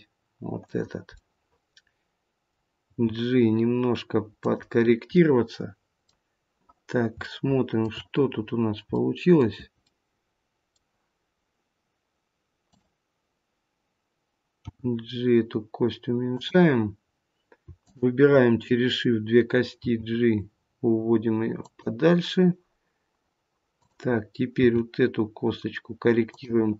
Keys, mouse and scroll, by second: 1.1 middle click, 2.8 g, 5.1 middle click, 7.2 shift+middle click, 8.2-8.9 scroll up 3, 8.9 scroll up 1, 9.0 middle click, 9.8 middle click, 12.5 click, 14.6 g, 17.7 shift+click, 19.8 g, 23.7 click, 24.5 g.